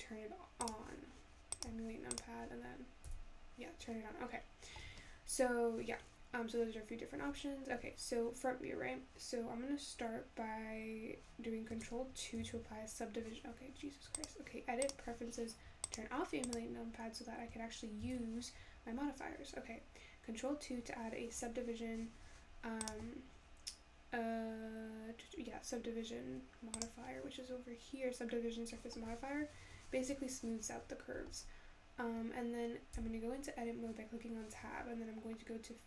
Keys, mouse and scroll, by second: 12.4 ctrl+KP_2, 14.2-17.2 drag, 18.0 ctrl+2, 22.9 click, 28.8 click, 33.2 Tab.